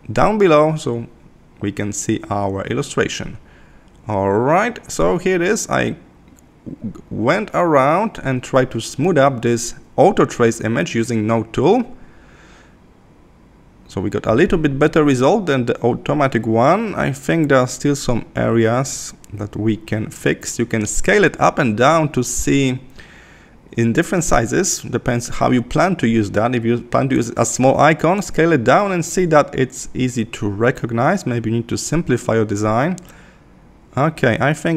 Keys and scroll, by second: 0.7 super+-, 2.3 super+0, 29.2 super+=, 32.2 super+=.